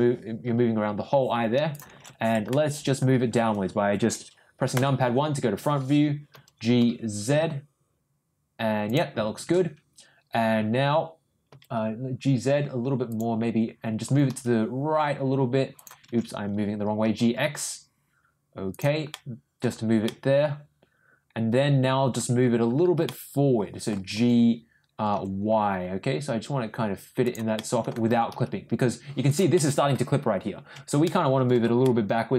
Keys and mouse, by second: 2.5 middle click, 6.3 g, 11.5 g, 14.0 g, 17.0 ctrl+g, 19.1 middle click, 20.0-21.2 middle drag, 20.0 g, 21.3 middle click, 23.0 middle click, 24.1 g, 27.5 middle click, 28.0 g, 29.5 middle click, 31.0 middle click, 31.8 middle click.